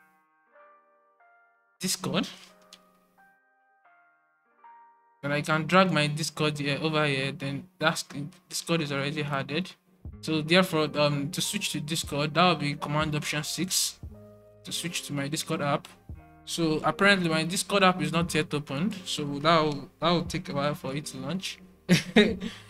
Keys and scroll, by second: 1.2-3.2 typing, 5.3-6.0 typing, 14.3 typing, 17.1 alt+super+`, 20.8 alt+super+6.